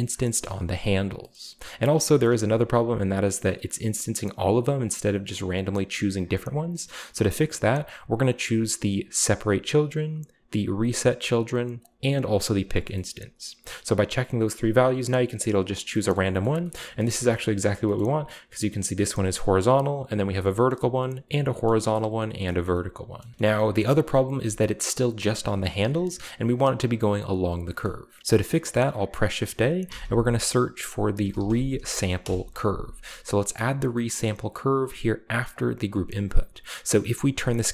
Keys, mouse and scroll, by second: 0.0 middle click, 0.3 shift+middle click, 0.5 Tab, 1.3 middle click, 2.3-3.0 shift+scroll up 1, 6.9-8.7 middle drag, 7.2-8.7 drag, 9.3-10.2 drag, 10.6 click, 11.8 click, 12.2-13.1 scroll down 1, 12.5 shift+middle click, 14.5-15.5 scroll up 1, 14.5-15.3 middle drag, 16.2 shift+middle drag, 16.3-18.3 shift+scroll up 3, 16.4 shift+middle drag, 16.8 shift+middle click, 17.1-17.8 shift+middle drag, 18.0-18.6 shift+middle drag, 20.7-21.3 shift+middle drag, 21.4 shift+middle drag, 22.3-22.8 scroll down 1, 22.5-23.2 shift+middle drag, 23.5 Tab, 24.0 right click, 24.2 g, 25.3 right click, 25.5 Tab, 27.8 middle drag, 29.9 typing, 31.2 typing, 32.2 Return, 35.5 click, 35.9 click, 37.1-37.7 drag.